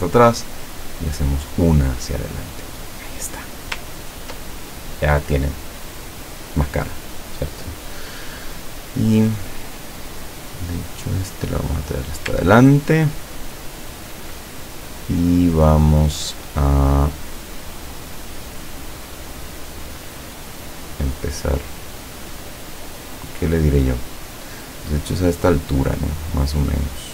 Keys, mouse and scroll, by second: 0.8 click, 2.3-3.1 scroll down 2, 3.7-4.3 scroll down 3, 4.5-5.2 ctrl+scroll up 4, 6.1 scroll up 2, 8.9 click, 12.0 click, 12.6-13.0 ctrl+scroll up 2, 13.2-14.1 ctrl+scroll down 2, 18.3 click.